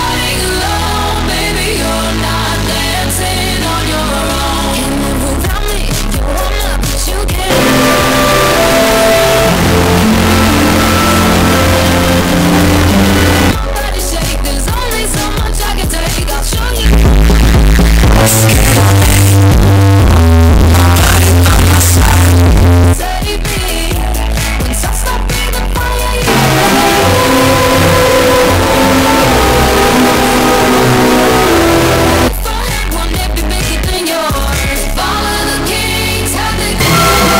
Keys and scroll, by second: 13.5 Page_Down, 23.7 Page_Down, 32.3 Page_Down.